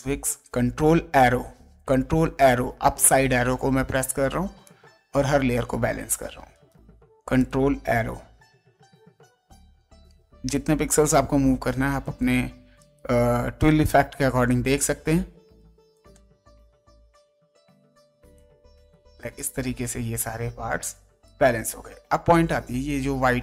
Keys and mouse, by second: 0.7 ctrl+Up, 4.0 space, 4.6 click, 6.5 right click, 7.4 click, 8.2 ctrl+Up, 11.0 right click, 13.6 ctrl+click, 14.4 ctrl+Up, 17.9 space, 18.3 click, 19.0 ctrl+space, 19.3 ctrl+click, 20.8 ctrl+space, 21.2 ctrl+click, 22.4 ctrl+space, 22.8 click.